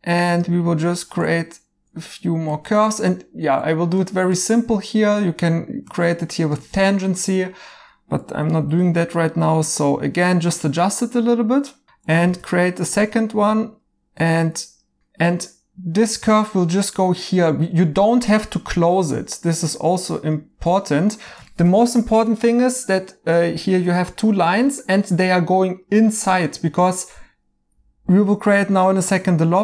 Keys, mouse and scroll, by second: 6.9 right click, 9.0 1, 12.2 f, 15.0 right click, 20.6 2, 21.5 right click, 24.5 right click, 28.8 right click.